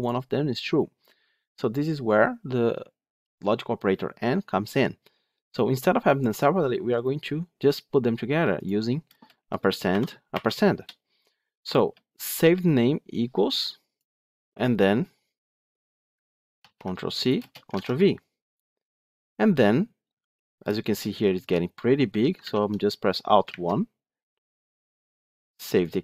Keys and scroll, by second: 16.5 ctrl+c, 17.6 ctrl+v, 22.3 alt+1.